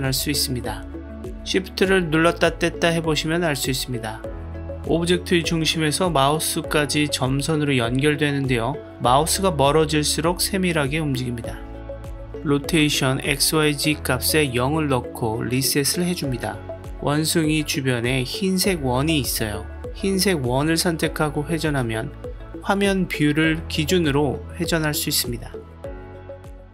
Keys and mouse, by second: 13.3-15.3 drag, 18.7 click, 18.9-20.6 drag, 21.0-21.9 middle drag, 22.9-26.4 drag.